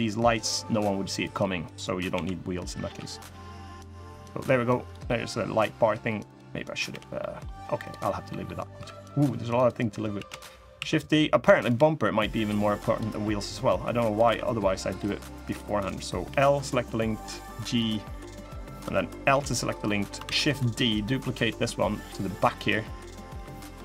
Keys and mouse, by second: 1.9 l, 2.6 g, 4.8 middle click, 6.0 click, 6.6 l, 6.9 middle click, 7.5 click, 8.0 middle click, 8.5 3, 8.8 middle click, 9.3 click, 9.9 shift+d, 10.5 s, 12.2 click, 13.3 click, 14.0 e, 16.0 l, 16.6 g, 17.8 click, 17.9 middle click, 18.5 click, 19.0 l, 19.6 middle click, 20.0 shift+d, 20.6-22.3 drag, 22.8 middle click, 23.1 3, 23.6 middle click.